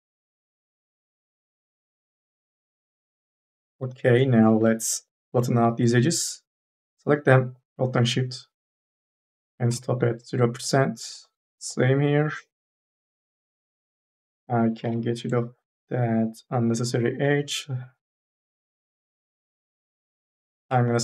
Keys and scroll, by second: 4.4 1, 4.8 2, 4.8 e, 6.1 t, 11.7 s, 13.7 2, 14.7 m, 15.1 n, 19.9 3.